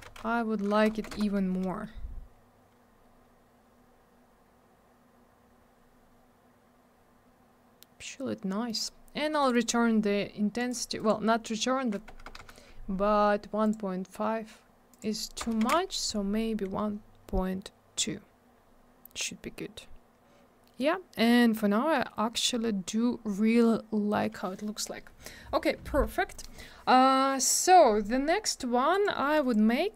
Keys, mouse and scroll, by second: 1.4 Return, 5.6-6.9 scroll down 1, 8.7 middle click, 8.8 middle click, 9.4 click, 10.6 click, 10.7 click, 11.0 click, 11.1 click, 13.6 Escape, 13.6 click, 13.7 click, 14.9 click, 15.0 click, 17.2 scroll up 1, 18.6-19.1 scroll down 1, 20.8-21.7 scroll up 1, 22.4-22.8 scroll down 1, 28.9 click, 29.0 click, 29.4 click, 29.5 click.